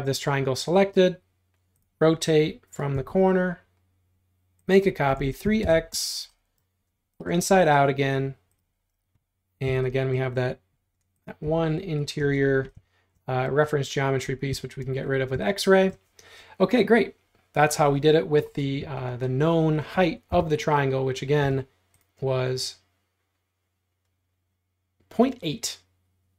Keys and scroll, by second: 5.2-5.7 typing, 9.7 x, 11.5 e, 12.2 space, 14.6 x, 14.9 space, 20.3 l, 21.5 t.